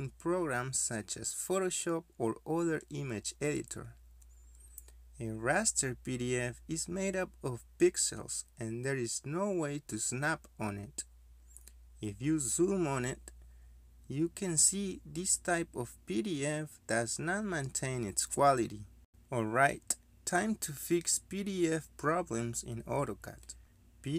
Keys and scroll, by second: 11.2 z, 11.2 space, 11.6 space, 23.0 Escape.